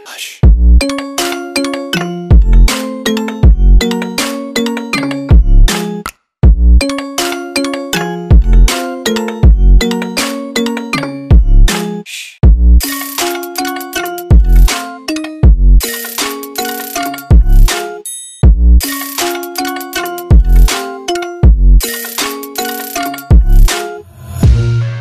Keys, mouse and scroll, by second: 0.6 Return, 3.7 click, 5.7 Return, 9.3 click, 10.5 Return, 12.7-13.5 scroll down 1, 13.5 click, 14.0 Delete, 14.7-16.0 scroll up 1, 16.0 click, 16.9-17.9 scroll down 1, 18.4 click, 19.7 scroll up 1, 20.5 click.